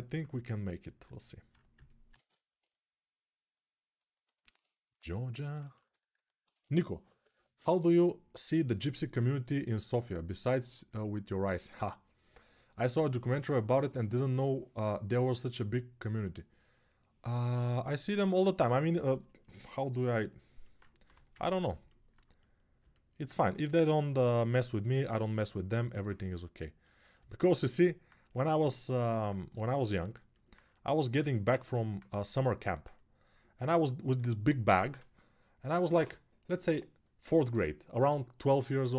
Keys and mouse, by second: 0.6-25.8 alt+drag, 20.8 g, 29.4 alt+click, 29.6 alt+click, 30.1-38.9 alt+drag.